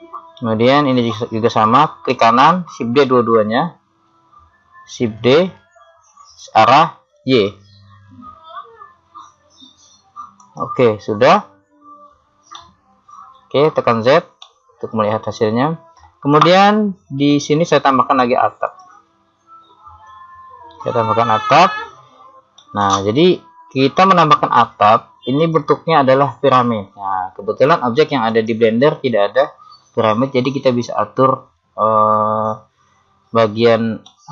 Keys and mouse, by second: 2.1 right click, 5.2 shift+d, 12.7 middle click, 14.0 z, 15.0 middle click, 16.2-17.3 middle drag, 20.3 click, 22.6 middle click, 23.5-24.8 middle drag, 34.1-34.3 middle drag.